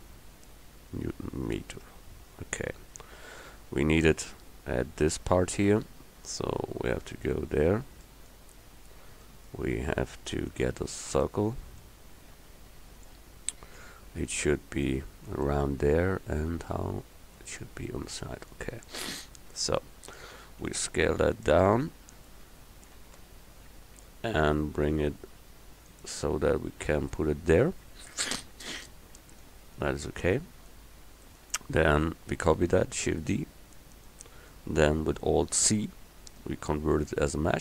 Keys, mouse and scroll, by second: 1.9 Tab, 8.0 click, 10.6 click, 15.7-19.4 middle drag, 20.5 s, 23.2 KP_1, 24.4 g, 29.5-33.1 drag, 33.1 shift+d, 34.1-35.8 drag, 35.8 alt+c.